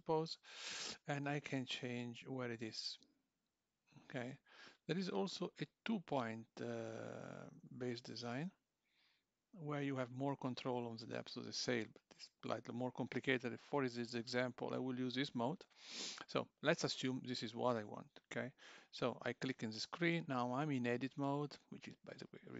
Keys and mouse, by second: 1.2 click, 6.0 click, 12.2 click, 19.2 click.